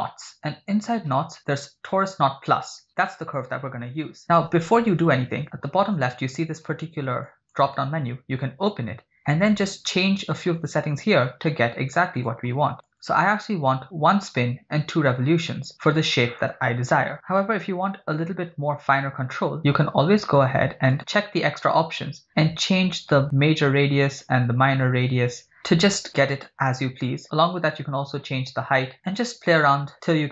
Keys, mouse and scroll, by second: 7.4 click, 12.2 click, 12.9 click, 20.9 click, 23.3-24.4 drag, 25.2-27.2 drag, 27.9-30.1 drag.